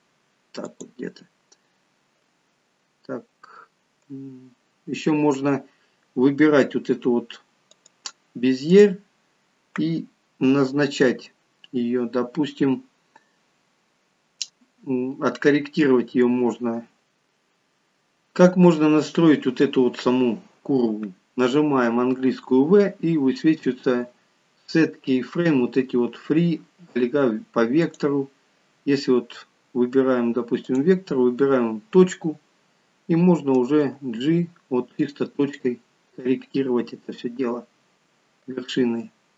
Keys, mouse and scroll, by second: 5.1 scroll up 4, 7.8 click, 8.9 click, 17.0 click, 19.1-20.0 scroll up 4, 20.0-22.1 scroll down 1, 22.1 v, 30.7 click, 33.8 g.